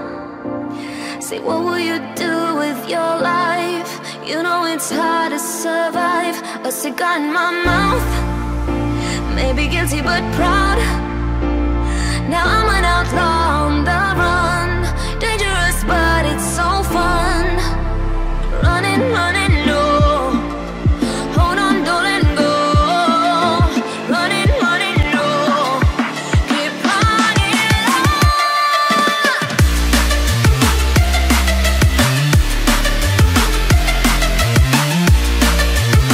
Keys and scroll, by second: 16.8 z, 29.5 t.